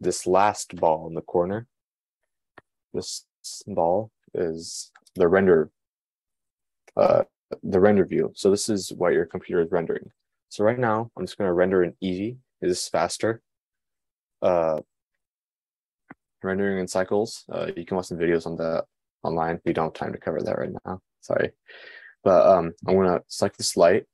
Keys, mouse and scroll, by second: 6.0 click.